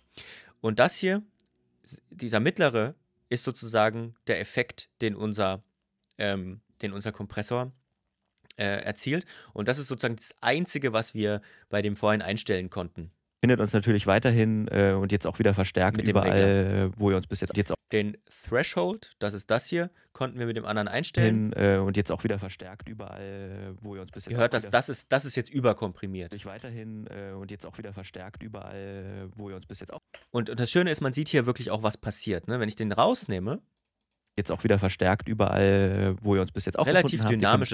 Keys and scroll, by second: 13.2 space, 17.5 space, 21.0 space, 23.7 space, 26.1 space, 29.7 space, 34.1 space.